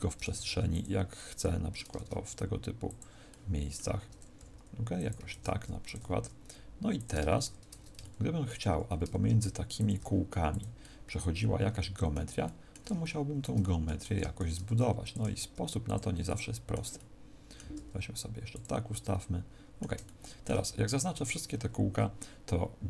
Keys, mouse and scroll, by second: 0.3 shift+d, 0.7 click, 1.1 middle click, 1.9 shift+d, 2.9 click, 3.2 middle click, 4.3 r, 5.1 click, 5.2 shift+d, 5.8 click, 6.9 click, 7.9 shift+middle click, 9.2 shift+d, 9.8 click, 10.4 r, 10.5 click, 10.7 middle click, 12.3 middle click, 12.9 shift+middle click, 13.5 middle click, 14.3 shift+d, 15.1 click, 15.1 r, 15.9 click, 16.2 middle click, 16.9 middle click, 17.6 r, 18.5 click, 18.8 middle click, 19.9 shift+middle click, 20.8 a, 21.1 a.